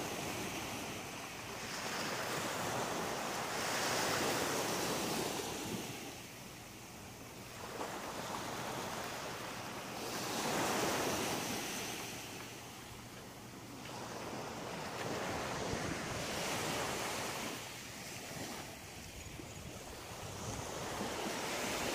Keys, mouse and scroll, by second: 0.4 scroll up 2, 1.4 right click, 1.9 shift+right click, 2.7 m, 3.9 right click, 4.4 shift+right click, 5.4 m, 6.1 shift+middle click, 7.0-7.3 scroll up 2, 8.0 right click, 9.2 right click, 9.5 middle click, 12.6 shift+right click, 13.1 middle click, 14.6 m, 16.2 middle click, 17.3 shift+middle click, 18.8 right click, 19.4 middle click.